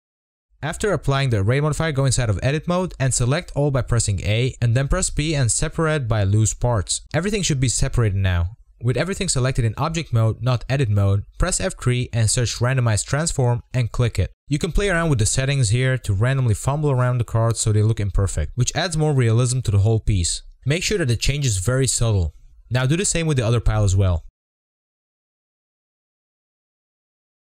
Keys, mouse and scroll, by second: 2.9-4.4 drag, 4.4 Tab, 4.6 a, 7.2 p, 7.5 Tab, 14.5 F3, 15.2 scroll up 5, 15.3 shift+middle click, 15.6 shift+click, 16.2 shift+click, 17.5 shift+click, 17.9-18.5 scroll down 3, 18.0 middle click, 18.6 click, 18.8 shift+middle click, 18.9 scroll up 7, 19.0 scroll down 4, 19.5 drag, 19.7 Tab, 19.9-22.1 typing, 20.0 Tab, 20.2 F3, 20.4 click, 20.4 scroll down 2, 20.5 middle drag, 20.8 scroll up 4, 21.4 scroll down 4, 21.6 scroll up 1, 22.5 middle click, 22.6 scroll up 5, 22.7 middle click, 24.4 scroll down 2, 24.4 click, 24.5 click, 24.5-25.0 scroll up 4, 25.0 click, 26.0 z, 26.1-26.5 scroll up 19, 26.2 middle click, 26.3 shift+middle click, 26.5 KP_0, 27.1 scroll down 1, 27.3 middle click.